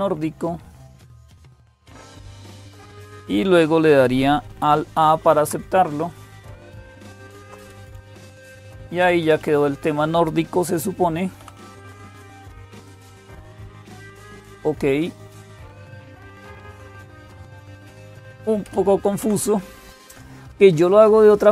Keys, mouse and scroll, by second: 0.0-21.5 typing, 5.0 alt+a, 7.0 alt+super+d, 8.6 Down, 8.8 Down, 9.0 Up, 11.2 Up, 11.5 Down, 12.1 Down, 18.1 Up, 18.4 Up, 19.0 Down.